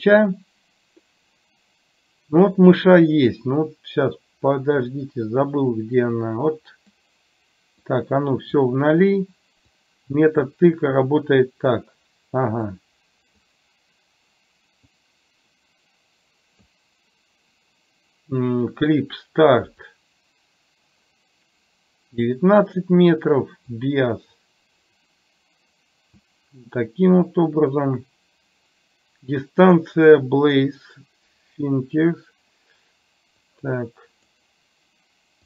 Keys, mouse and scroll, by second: 6.3 click, 7.8 click, 10.0 click, 12.8 click, 15.0-16.8 drag, 20.1-22.3 drag, 24.0-25.2 drag, 33.5 click.